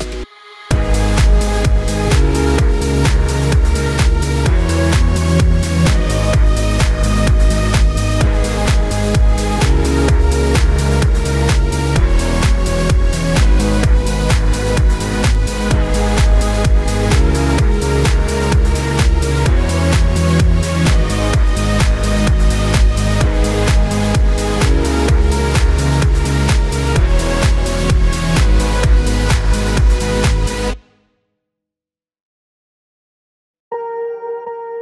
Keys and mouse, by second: 0.4-5.2 typing, 2.0-7.6 middle drag, 5.8-20.4 ctrl+right drag, 6.2 ctrl+z, 6.8 r, 7.7-9.3 drag, 7.7-9.3 middle drag, 9.6 z, 11.0-15.9 drag, 11.0-34.8 middle drag, 13.9 KP_1, 14.0 KP_3, 15.1 r, 16.4-21.6 drag, 19.8 z, 20.8 z, 23.1 shift+d, 23.6 KP_1, 24.9 r, 26.5 g, 27.8-29.4 drag, 30.2 z, 32.0-34.8 drag.